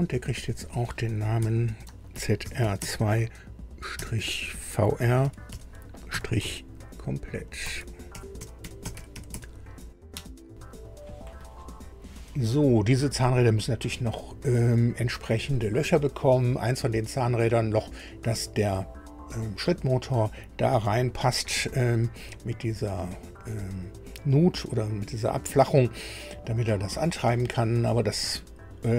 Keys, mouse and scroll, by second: 0.5 click, 1.3 F2, 1.8-3.9 typing, 5.2 shift+v, 5.4 shift+r, 6.1 -, 7.6-9.6 typing, 10.1 Return, 11.5 scroll up 2, 28.4 scroll down 2.